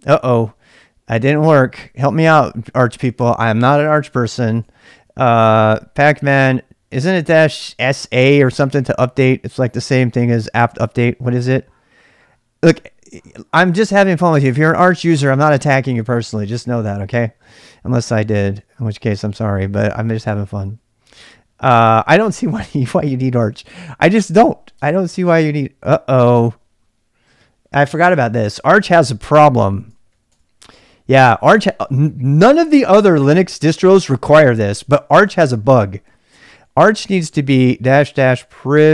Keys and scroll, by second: 0.0-3.2 typing, 4.3-6.6 typing, 19.4-21.0 typing, 24.8 Return, 29.5-32.8 typing, 31.2 ctrl+[, 34.7-38.9 typing.